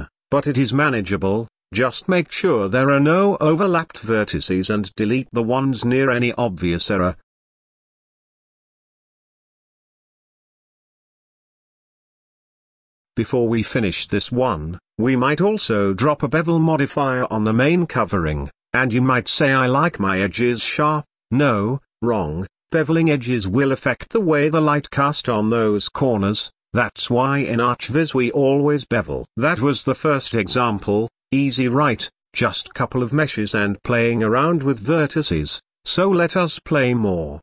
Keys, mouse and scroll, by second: 2.4-2.8 scroll up 2, 4.3 click, 5.0 Tab, 5.3 a, 6.0-8.1 right drag, 9.1 scroll down 3, 9.3 middle click, 9.6 scroll up 1, 9.7 Tab, 9.8-10.7 middle drag, 10.9-11.4 drag, 12.7-13.7 drag, 13.7 shift+middle drag, 13.9 scroll up 1, 14.1 Tab, 14.5 click, 14.6 shift+middle click, 14.8 scroll up 1, 15.0 shift+click, 15.3 ctrl+x, 15.3-15.7 scroll down 2, 15.4 Tab, 15.7 scroll up 1, 15.8 alt+h, 15.9 scroll down 3, 16.1 click, 16.1 middle click, 16.6-17.1 scroll up 2, 17.8-21.5 drag, 22.0-23.5 drag, 23.5 ctrl+a, 24.4-24.8 scroll down 4, 24.8-26.6 middle drag, 28.8-31.5 drag, 31.8-33.9 drag, 35.5 click, 35.9-37.1 middle drag, 37.1-37.4 scroll up 3.